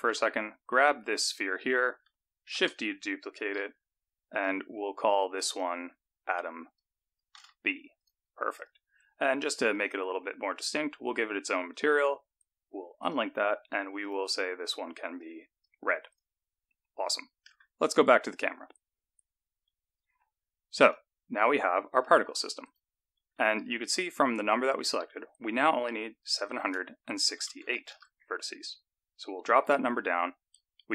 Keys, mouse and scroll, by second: 0.8-1.8 scroll down 3, 1.8-2.3 scroll down 1, 2.7 shift+d, 5.4 click, 5.5 click, 8.7 click, 9.8 click, 13.1 click, 14.1 click, 16.2 click, 16.8-17.6 scroll up 2, 17.6 KP_0, 18.5-19.8 scroll up 5, 20.9 click, 22.8 click, 23.7 Tab, 26.4 click, 30.3 Tab.